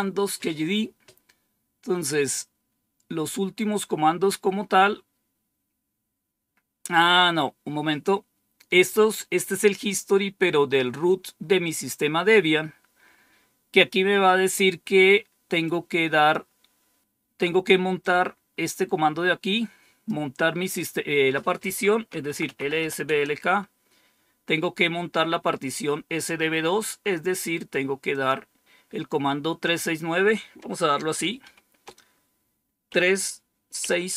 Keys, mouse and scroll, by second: 15.5 click, 17.9-20.0 drag, 21.8-23.2 typing, 28.0 click, 31.3 typing, 32.8-34.0 typing.